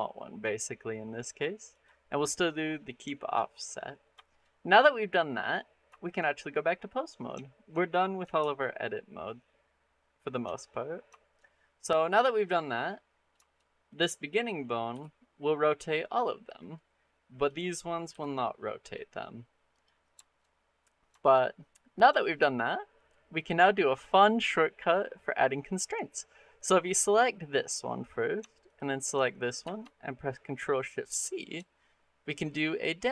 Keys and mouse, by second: 3.0 shift+middle click, 3.7 middle click, 4.1 shift+click, 4.2 middle click, 4.7 middle click, 5.8 shift+middle click, 6.1 middle click, 7.4 shift+middle click, 7.7 middle click, 8.2 ctrl+Tab, 11.1 shift+middle click, 11.4 middle click, 12.5 middle click, 13.2 shift+middle drag, 13.7 click, 14.2 middle click, 14.7 r, 16.4 click, 17.2 click, 17.9 r, 19.6 click, 20.0 shift+middle click, 20.4 middle click, 21.0 shift+middle click, 21.4 middle click, 22.0 shift+middle click, 22.3 middle click, 23.3 click, 26.4 click, 30.9 ctrl+shift+c.